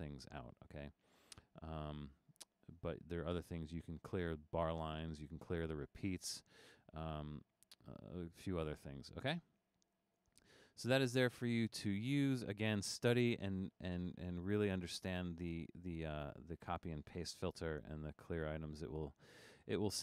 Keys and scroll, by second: 17.8 super+=, 18.6 super+-, 19.2 super+-.